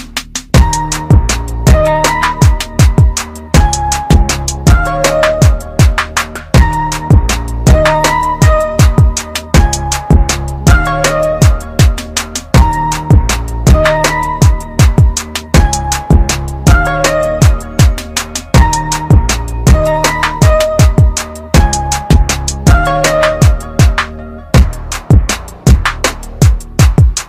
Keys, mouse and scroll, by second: 0.0 shift+click, 1.7 shift+click, 3.6 click, 7.0 ctrl+r, 7.6 ctrl+click, 7.8 ctrl+r, 9.6 ctrl+click, 9.8 ctrl+r, 10.7 ctrl+click, 10.9 ctrl+r, 11.6 ctrl+click, 11.8 ctrl+r, 13.2 ctrl+click, 13.5 ctrl+r, 14.1 ctrl+click, 18.3 r, 19.3 ctrl+click, 19.6 r, 21.0 ctrl+click, 21.3 r, 22.9 click, 24.7 r, 25.4 click, 25.6 r, 26.5 click, 26.7 r.